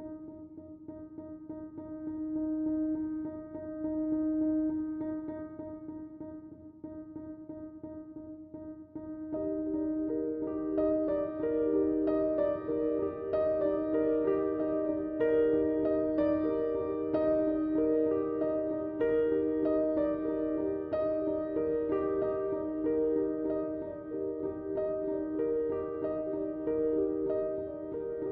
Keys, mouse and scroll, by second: 12.5 click, 16.3 click, 22.4 click.